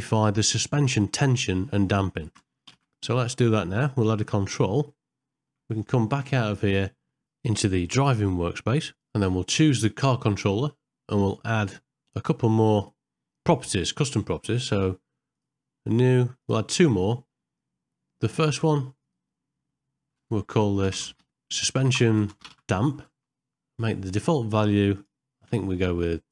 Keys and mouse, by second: 2.4 space, 2.8 shift+Left, 4.1 middle click, 4.6 ctrl+middle click, 5.3 shift+middle click, 10.4 click, 12.8 click, 13.5 middle click, 15.4 click, 16.5 click, 17.0 middle click, 19.1-26.3 drag, 21.3 BackSpace.